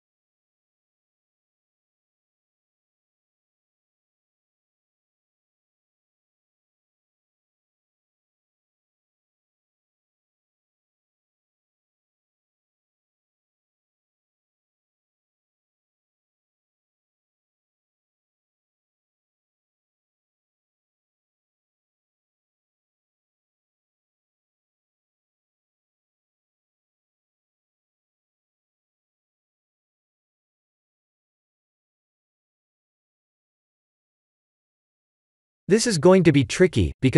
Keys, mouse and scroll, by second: 2.4 click, 3.7 s, 7.8 middle click, 9.1 middle click, 9.6 KP_1, 11.9 g, 15.4 s, 17.6 click, 20.9 click, 21.7-22.6 scroll down 3, 22.6 shift+click, 24.9 middle click, 26.1 middle click, 29.3 shift+z, 30.5 shift+z, 32.9 KP_1, 35.7 middle click.